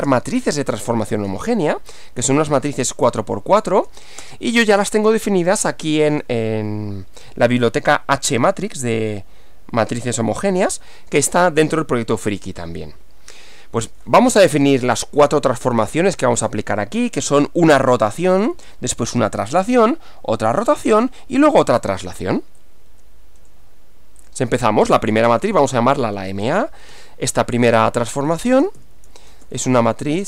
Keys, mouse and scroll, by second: 0.0-0.1 typing, 1.5-3.6 typing, 4.2 Return, 6.1 Return, 15.5 click, 22.6 click, 24.3 click, 25.3-26.9 typing, 28.6-30.2 typing.